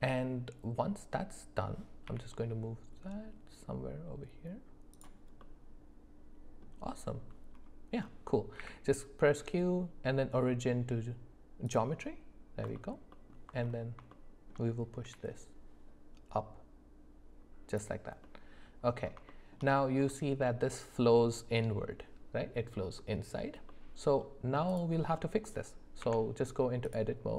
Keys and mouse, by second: 2.1 g, 5.4-6.6 middle drag, 8.6 q, 12.8 alt+middle click, 14.1 shift+middle click, 15.0 g, 18.2 middle click, 19.3 shift+middle click, 20.1 middle click, 23.7 middle click, 25.2 middle click, 26.0 Tab.